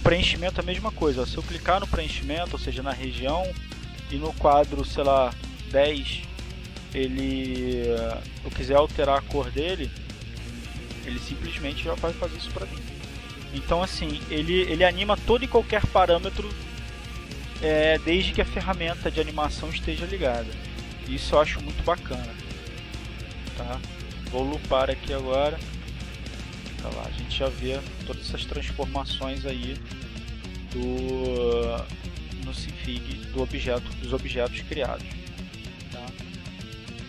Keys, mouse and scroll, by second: 1.6 click, 1.9 click, 5.3 click, 8.1-9.6 drag, 11.1 click, 11.8 click, 13.1 click, 14.3 click, 15.1-16.8 drag, 19.6-21.6 drag, 24.6-27.8 drag, 28.5 click, 35.8 click.